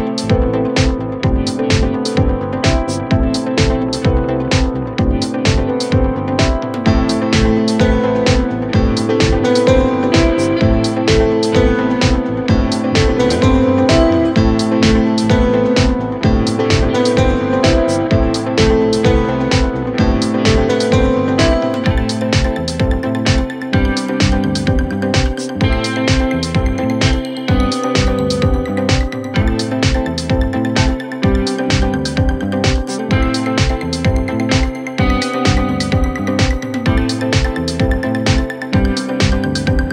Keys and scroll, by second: 1.6 0, 1.7 Return, 10.8 3, 22.3 4, 24.1 3, 24.3 ], 25.0 4, 28.4 3, 31.4 Delete, 32.5 f, 33.4 Delete, 34.1 Delete, 35.1 f, 37.1 4.